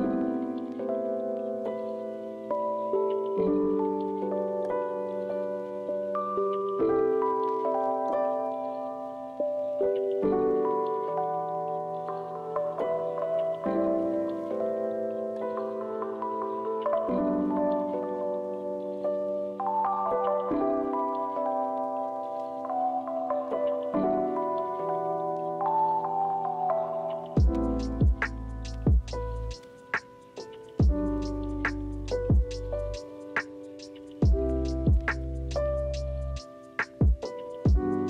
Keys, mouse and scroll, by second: 1.7 ctrl+z, 1.7 ctrl+f, 3.7 ctrl+4, 4.3 ctrl+z, 6.2 ctrl+z, 6.9 ctrl+z, 8.0 ctrl+c, 8.4 ctrl+z, 8.5 ctrl+z, 8.7 ctrl+z, 9.0 ctrl+z, 9.5 ctrl+shift+z, 10.3 ctrl+z, 10.6 ctrl+f, 19.6 ctrl+c, 20.0 ctrl+f.